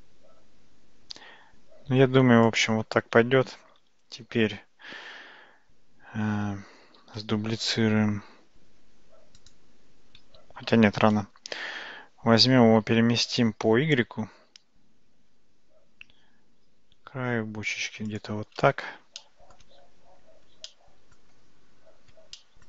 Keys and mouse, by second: 7.1 shift+d, 10.7 ctrl+z, 12.5 g, 19.2-19.6 shift+middle drag, 20.7-21.2 shift+middle drag, 22.4-22.6 shift+middle drag.